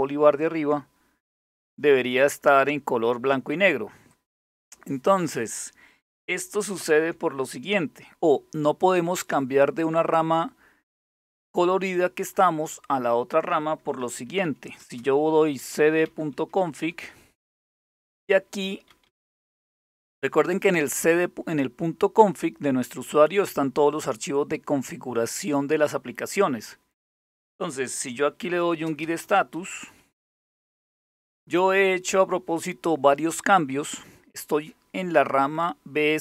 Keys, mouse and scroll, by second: 3.7 click, 6.4 super+Return, 13.8-16.1 typing, 16.4 Return, 18.3-19.0 typing, 27.8-30.3 typing, 36.1-36.2 drag.